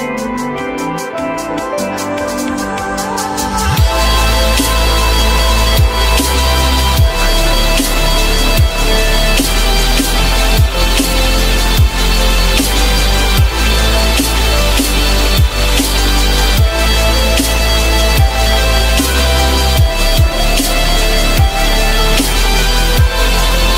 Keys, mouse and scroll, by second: 0.2 2, 1.5 shift+click, 2.1 shift+click, 8.4 F4, 10.6 F4, 12.3 shift+click, 13.8 shift+click, 14.5 shift+click, 15.6 alt+middle click, 16.1 alt+middle click, 17.0 alt+middle click, 18.9 F4, 22.3 F4.